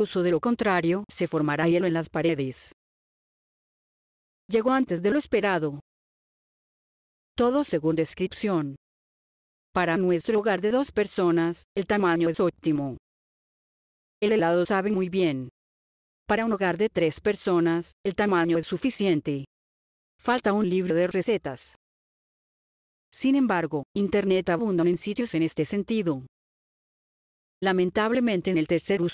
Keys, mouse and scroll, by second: 3.9 click, 9.2 click, 16.1 click.